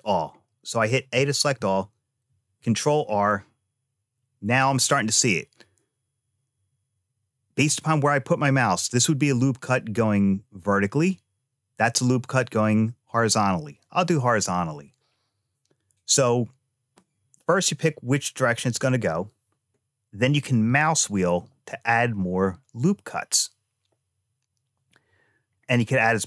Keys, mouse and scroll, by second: 0.3 middle click, 2.1 ctrl+r.